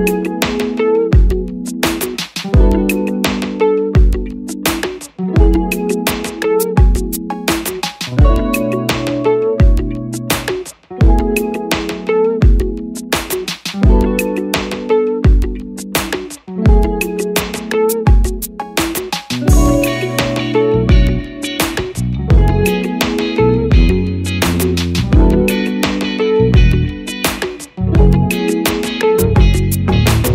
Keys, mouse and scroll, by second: 13.9 click.